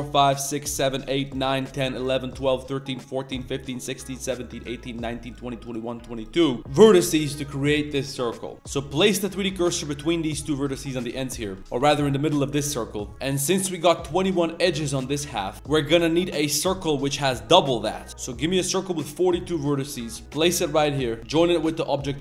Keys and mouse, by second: 0.5 shift+click, 0.9 shift+click, 1.2 shift+click, 1.6 shift+click, 1.9 shift+click, 2.3 shift+click, 2.6 shift+click, 2.9 shift+right click, 3.3 shift+right click, 3.7 shift+right click, 4.2 shift+right click, 4.5 shift+right click, 5.6-6.2 shift+right drag, 6.4 shift+middle drag, 6.9 shift+middle drag, 7.6 shift+middle drag, 8.5 ctrl+e, 9.1 shift+click, 9.4 shift+s, 11.6 Tab, 11.7 shift+s, 13.1 click, 13.1 1, 13.1 2, 13.8-15.3 ctrl+drag, 15.3 Tab, 15.5 shift+s, 15.5 shift+a.